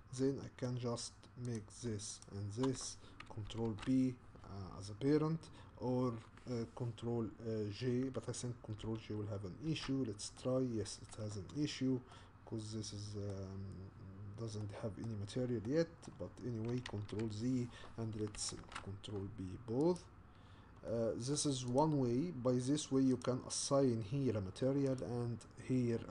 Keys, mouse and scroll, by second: 1.6 click, 2.2 shift+click, 9.7 ctrl+j, 10.5-13.5 middle drag, 13.5-14.6 scroll up 4, 14.6 middle click, 15.2-15.7 scroll down 3, 15.7-16.9 middle drag, 16.9 ctrl+z, 20.0 ctrl+p, 20.9 middle click, 21.8 click, 23.2 click, 25.0 click.